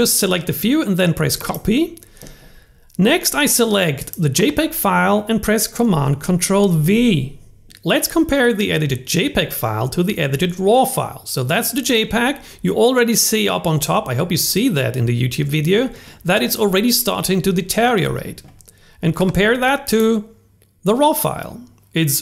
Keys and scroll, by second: 6.7 super+v.